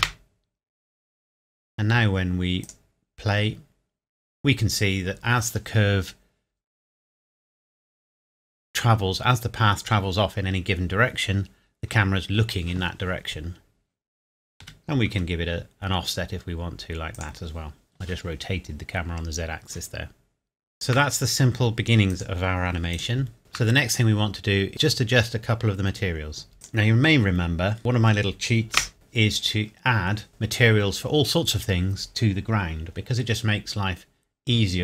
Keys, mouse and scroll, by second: 0.0 KP_0, 2.6 click, 14.6 r, 15.1 z, 17.2 click, 20.7 shift+middle click, 22.1 click, 23.4 shift+middle click, 26.5 click, 28.1 scroll up 1, 28.9 KP_0.